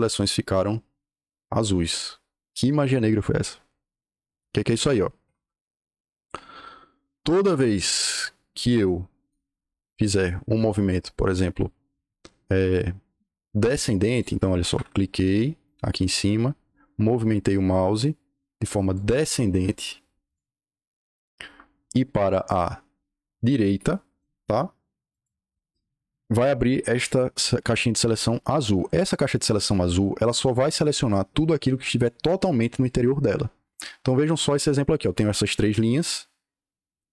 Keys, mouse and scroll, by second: 5.1 Escape, 5.4 Escape, 9.1 click, 14.0 click, 14.6 Escape, 14.7 Escape, 15.6 click, 18.8 click, 20.1 click, 21.0 click, 21.4 Escape, 21.6 Escape, 22.1 click, 25.0 click, 29.3 Escape.